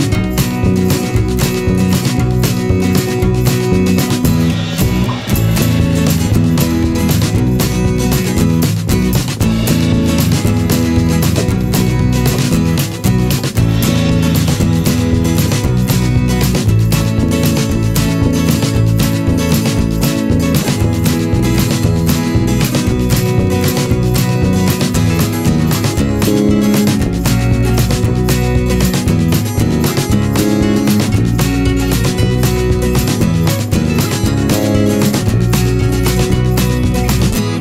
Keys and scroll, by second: 31.8 ctrl+z, 34.6 i.